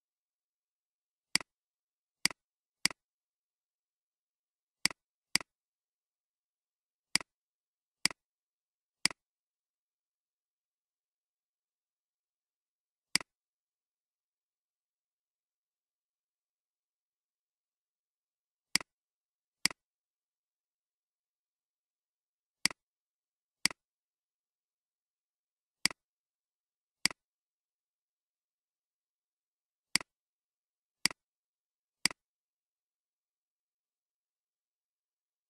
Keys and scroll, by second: 10.5-11.0 typing, 11.0 Return, 33.4-34.0 typing, 34.0 Return.